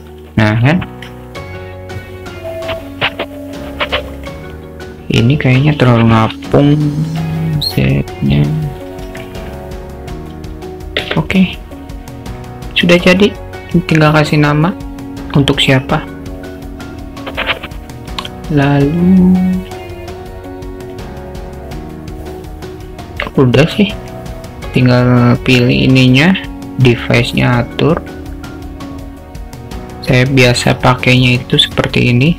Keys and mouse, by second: 0.4 click, 4.2 click, 6.3 g, 12.3 click, 24.0 click, 27.0-28.8 drag.